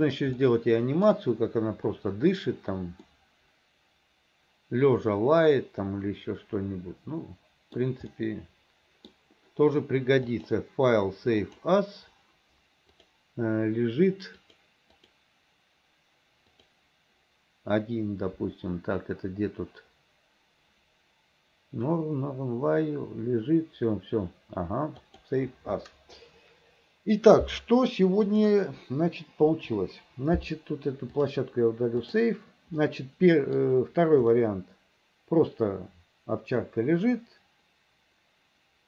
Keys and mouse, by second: 0.5 middle click, 3.3-7.9 middle drag, 8.2-9.2 middle drag, 10.4-11.9 drag, 28.4 click, 29.6 Delete, 31.2-32.3 drag, 32.9 middle click, 34.5-38.8 middle drag.